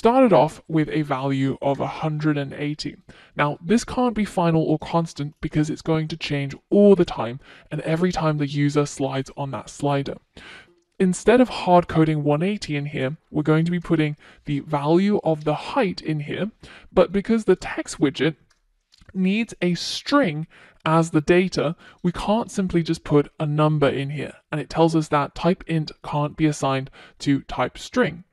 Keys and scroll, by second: 14.2 Return, 17.3 F1.